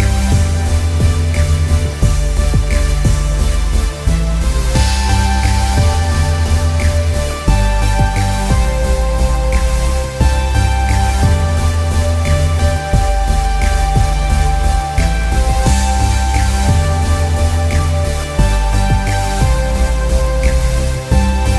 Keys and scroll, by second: 4.6 e, 19.0 r.